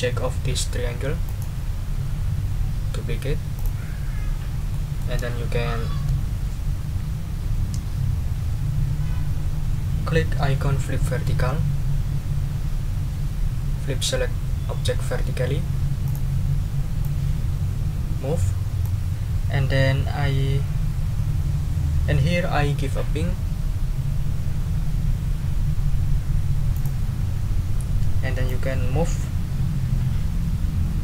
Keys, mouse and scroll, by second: 1.2 right click, 3.5 click, 4.7 middle click, 5.8 ctrl+scroll down 2, 9.9 scroll down 2, 16.0 click, 17.0-19.0 drag, 26.7 click, 28.4-31.0 drag.